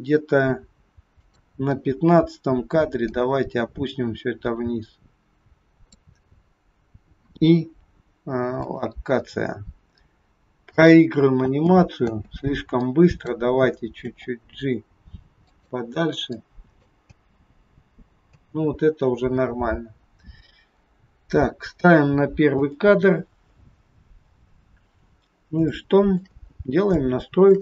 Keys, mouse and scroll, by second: 1.2 click, 3.0 click, 7.1 i, 10.6 click, 11.5 space, 12.0 space, 12.9 click, 14.0 g, 16.3 click, 17.1 space, 18.3 space, 19.5-19.9 scroll up 3, 20.8 scroll down 2, 20.9-21.2 scroll down 3, 22.5 click, 25.6 shift+middle click, 26.5-27.2 scroll up 4, 27.0 shift+middle click.